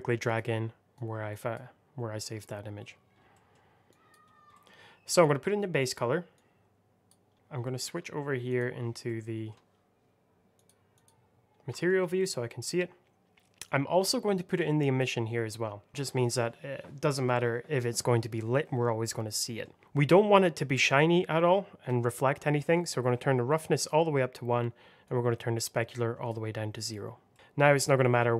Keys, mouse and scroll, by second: 0.1 click, 2.7-3.2 scroll up 1, 3.2 middle click, 3.8 click, 4.2 scroll down 1, 4.4 middle click, 5.1 click, 7.3 middle click, 7.5 middle click, 8.4 click, 8.9 middle click, 10.5 click, 11.4 scroll up 1, 11.6 shift+middle click, 11.9 scroll up 1, 12.1 middle click, 13.5 click, 19.2 middle click, 22.6 click, 24.9 click, 27.2 middle click, 27.3 r.